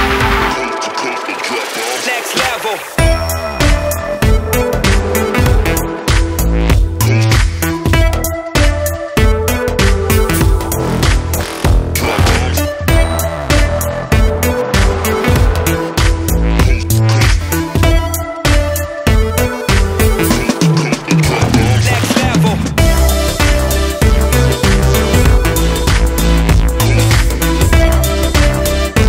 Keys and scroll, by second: 1.7 ctrl+z, 3.7 [, 4.0 [, 4.2 [, 14.7-17.3 [, 17.4 [, 20.9 ctrl+z.